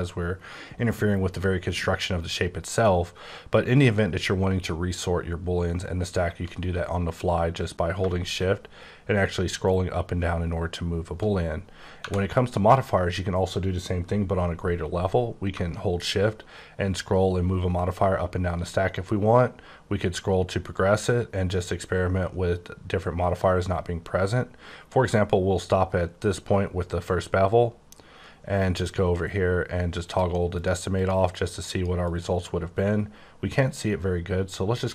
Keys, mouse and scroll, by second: 0.3 shift+scroll down 2, 1.1 scroll down 3, 1.9-3.0 shift+scroll down 5, 3.4-3.7 shift+scroll down 4, 3.7-4.4 shift+scroll up 6, 4.6-5.1 shift+scroll down 4, 5.1-6.5 shift+scroll up 5, 6.5-6.8 scroll up 1, 6.8-7.3 scroll down 1, 7.3-7.9 scroll up 2, 8.3-8.9 shift+scroll down 2, 8.9-9.5 shift+scroll up 6, 9.5-10.2 shift+scroll down 9, 10.2-10.8 shift+scroll up 5, 16.2-17.4 shift+scroll down 12, 17.4 shift+scroll up 1, 17.5 scroll, 17.6-18.7 shift+scroll up 16, 18.8-19.4 scroll down 2, 19.4-21.5 scroll up 8, 21.5-23.2 scroll down 14, 23.2-23.9 scroll up 10, 24.2-25.0 scroll down 5, 25.0-25.7 scroll down 4, 25.7-26.8 scroll up 3, 30.0 click, 30.4 click, 30.9 click, 31.3 click, 31.7 click, 32.1 click.